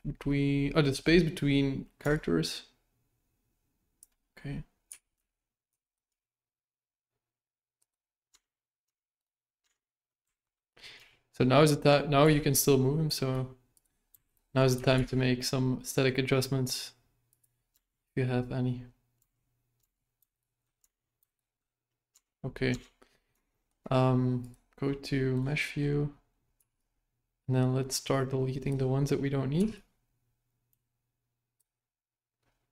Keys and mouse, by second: 2.1-4.0 shift+drag, 4.9 g, 6.1 g, 8.3 Tab, 8.8 Tab, 9.6 Tab, 10.3 alt+right click, 10.9 g, 14.3 alt+right click, 14.7 g, 17.7 Tab, 19.1 Tab, 19.8 Tab, 20.3 alt+right click, 20.8 Tab, 21.3 alt+right click, 22.1 Tab, 22.7 Tab, 23.5 shift+middle click, 24.4 click, 25.3 right click, 26.5 b, 30.1 b.